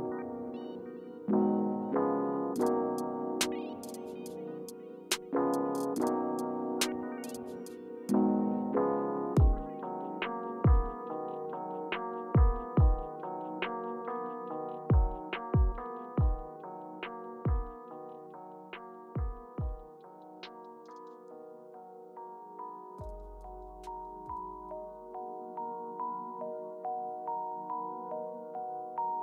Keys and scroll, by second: 0.1 Return, 4.6 Return.